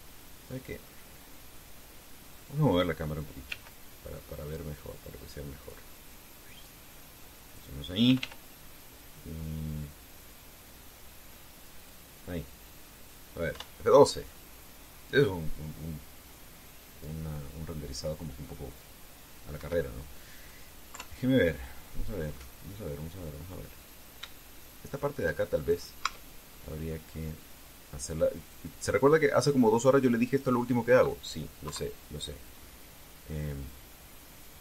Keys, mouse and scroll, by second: 1.4 scroll down 2, 3.3 right click, 4.2 g, 8.2 click, 8.8 r, 12.5 click, 14.3 F12, 20.3 Escape, 21.7 KP_3, 23.0-23.5 scroll up 2, 24.2-24.6 scroll up 2, 25.3 shift+middle click, 26.3 shift+right click, 26.7 shift+Tab, 27.2 shift+middle click, 29.1 click, 31.0 right click, 31.6 middle click, 32.4 KP_3, 34.1-34.6 drag.